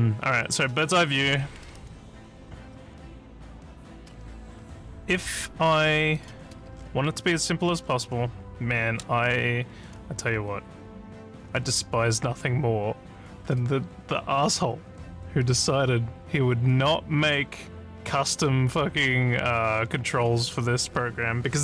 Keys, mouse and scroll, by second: 2.2 alt+scroll, 2.3 alt+scroll, 4.1 s, 5.7 click, 6.2 click, 6.7 alt+scroll up 4, 7.8 ctrl+scroll up 3.